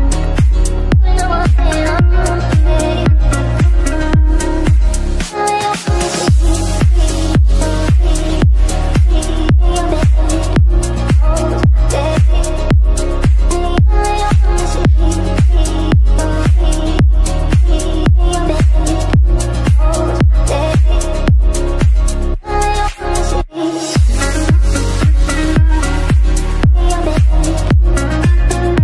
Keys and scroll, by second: 10.6 f, 26.7 shift+Page_Up.